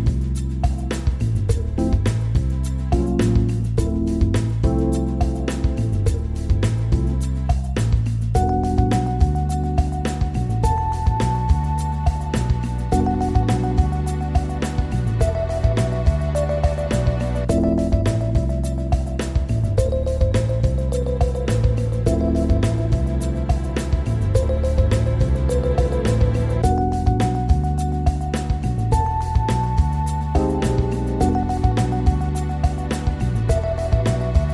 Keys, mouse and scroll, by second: 0.1 drag, 1.4 click, 9.2-12.0 drag, 14.6-17.1 drag, 20.7 click, 21.4 drag, 22.2-23.2 scroll down 3, 23.8 click, 24.8 drag, 25.5-26.1 scroll up 4, 29.0 click, 33.4-34.5 drag.